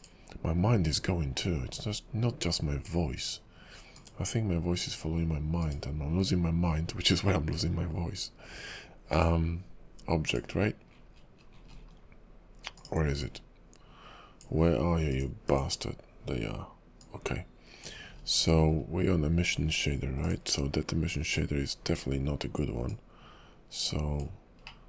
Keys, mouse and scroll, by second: 15.1 click, 15.5 click.